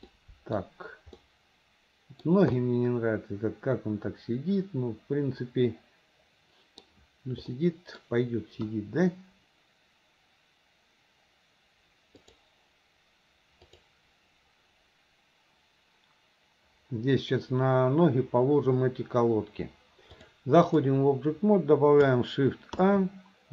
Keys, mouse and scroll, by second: 0.1 scroll up 2, 0.3 middle click, 0.6 scroll down 2, 1.2-2.3 middle drag, 2.3 scroll down 1, 2.6-3.1 scroll up 1, 3.1-6.9 middle drag, 7.6-8.1 middle drag, 8.9 KP_1, 12.2 click, 13.7 click, 20.3-20.9 drag, 22.8 shift+a.